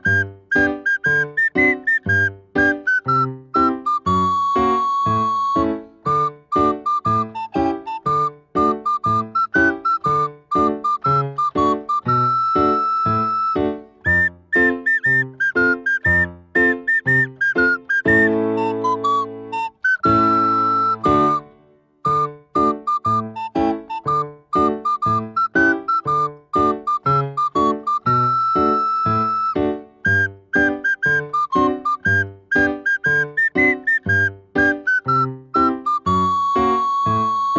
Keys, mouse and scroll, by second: 0.0 click, 1.0 scroll up 1, 1.5-3.0 middle drag, 3.0-5.8 drag, 5.8-8.4 middle drag, 8.4-10.6 drag, 11.5-14.6 middle drag, 14.7 click, 14.9-17.0 drag, 17.0 e, 21.0 click, 24.7-27.9 drag, 31.5-33.7 middle drag, 33.7 s, 35.9 ctrl+a.